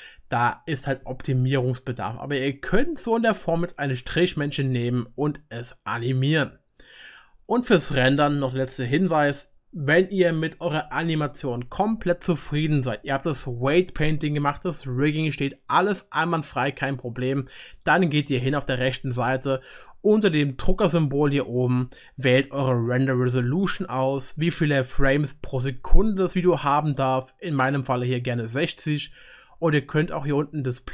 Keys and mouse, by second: 21.0-25.5 drag.